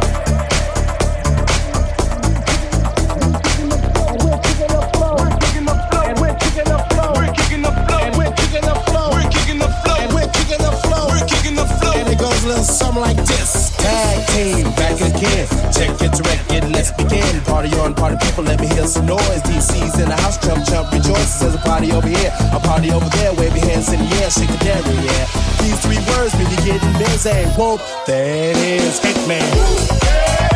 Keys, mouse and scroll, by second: 2.7 c, 4.4 c, 4.4 alt+z, 5.9 z, 10.8-12.2 drag, 12.2-14.1 middle drag, 14.1-22.1 drag, 22.2 ctrl+click, 23.0-24.7 shift+drag, 24.8-30.5 drag, 29.7 z.